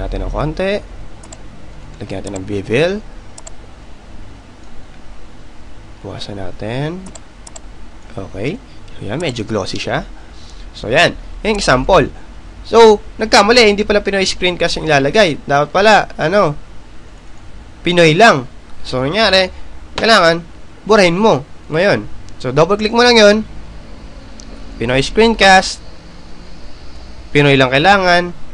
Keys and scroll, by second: 24.9 y.